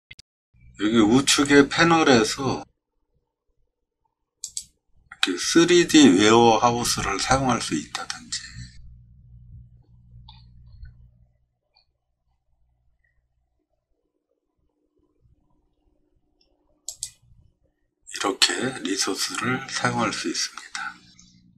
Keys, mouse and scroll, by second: 4.4 click, 7.3 scroll down 2, 8.7-9.2 scroll down 4, 9.9 scroll up 3, 10.0 middle click, 10.2 middle click, 10.2 scroll down 2, 10.4 middle click, 13.6 middle click, 13.6 scroll down 4, 13.8 middle click, 16.9 click.